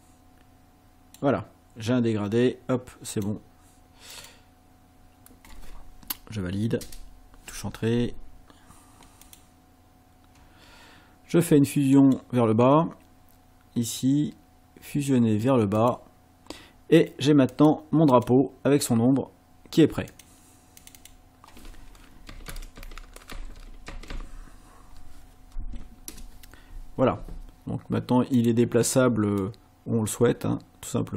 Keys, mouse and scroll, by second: 3.2 click, 4.2 click, 6.8 Return, 9.3 click, 12.0 right click, 15.8 click, 17.5 click, 18.1 click, 20.1 click, 20.8 click, 22.0-24.6 typing, 26.1 Return, 28.4 click, 29.4-31.1 drag.